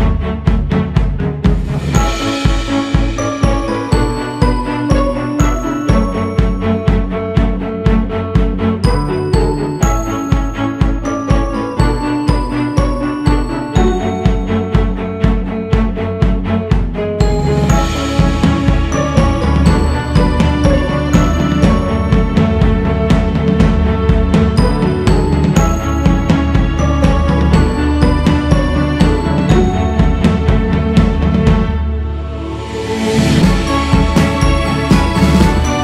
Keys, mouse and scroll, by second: 4.5 scroll down 5, 8.4 click, 10.4-11.4 scroll up 1, 11.6-12.2 scroll up 3, 12.2 shift+s, 13.7-23.9 drag, 23.9-24.7 scroll down 8, 28.2-30.3 drag, 30.3-31.4 scroll up 2, 31.7-35.4 scroll down 7.